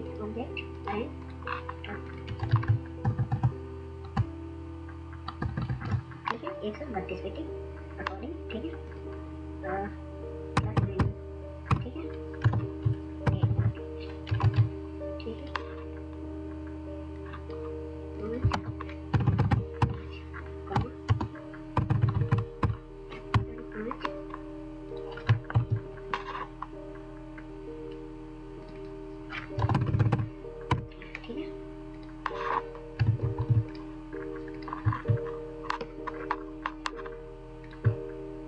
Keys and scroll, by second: 3.1 ctrl+shift+a, 10.7-11.6 typing, 12.4 ctrl+Right, 13.2 8, 13.4 8, 14.4 ctrl+z, 19.0 typing, 20.4-21.8 typing, 23.0-23.7 typing, 25.4 ctrl+0, 25.4 typing, 29.6 9, 29.7 9.